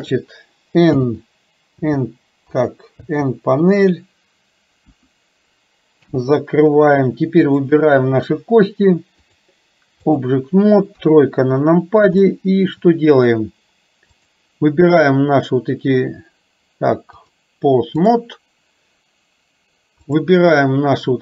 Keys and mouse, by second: 1.0 m, 6.1 n, 7.6 click, 9.5 click, 11.1 KP_3, 12.4 shift+middle click, 17.4 click.